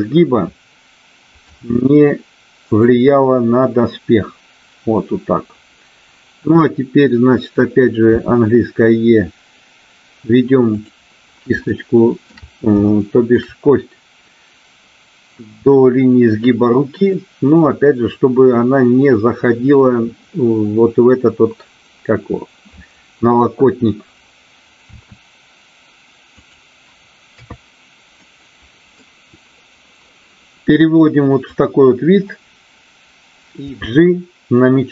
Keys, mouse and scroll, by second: 1.3 g, 2.7 click, 8.1 e, 10.7 click, 11.7 shift+middle click, 13.0 shift+middle click, 24.8 e, 27.2 KP_3, 28.2 middle click, 31.5 click, 33.6 g.